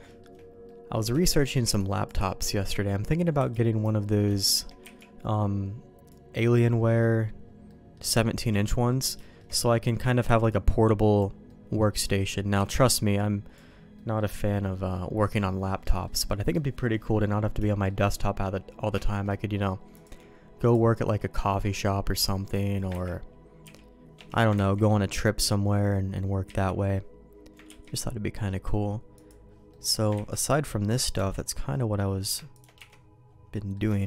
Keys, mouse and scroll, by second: 0.0 shift+middle click, 0.6 middle click, 1.1 shift+middle click, 1.6 b, 2.2 middle click, 3.3 b, 4.0 middle click, 4.3 shift+middle click, 4.8 b, 6.4 middle click, 7.6 middle click, 8.1 shift+middle click, 8.8 middle click, 9.1 shift+middle click, 9.5 middle click, 10.2 b, 11.4 middle click, 12.0 middle click, 12.5 b, 13.9 middle click, 14.4 middle click, 15.8 middle click, 17.6 shift+middle click, 18.2 middle click, 19.0 shift+middle click, 20.1 click, 21.0 middle click, 22.3 middle click, 23.0 ctrl+x, 23.6 b, 24.5 ctrl+z, 26.4 ctrl+z, 27.6 ctrl+q, 29.6 middle click, 30.1 ctrl+x, 30.4 middle click, 31.1 Tab, 32.2 click, 32.5 shift+click, 32.7 1, 33.5 middle click, 33.9 shift+middle click.